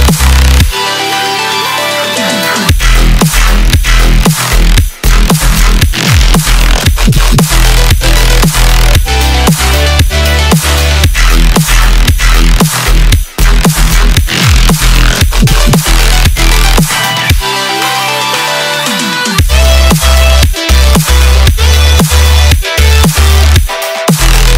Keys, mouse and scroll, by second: 5.6 space, 6.1 click, 6.7-7.1 scroll down 1, 7.4 scroll down 1, 8.7-11.8 drag, 12.1-13.4 scroll down 2, 14.2-15.7 drag, 15.7 space, 18.2-19.9 middle drag, 19.9-21.2 scroll up 1, 21.2-24.2 shift+middle drag.